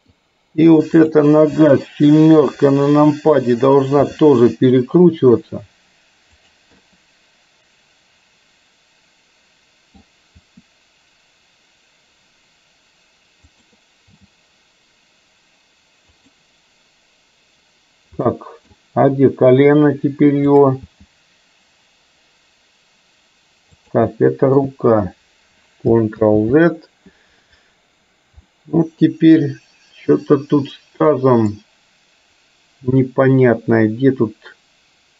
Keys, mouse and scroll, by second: 1.0 click, 2.5 KP_7, 4.1 r, 6.9-10.0 middle drag, 10.5 r, 14.3 g, 18.4 middle click, 18.8 scroll down 1, 20.8 click, 20.9 g, 24.3-24.8 middle drag, 24.3 scroll up 1, 26.3 ctrl+z, 28.5-31.6 middle drag, 33.1-35.1 middle drag.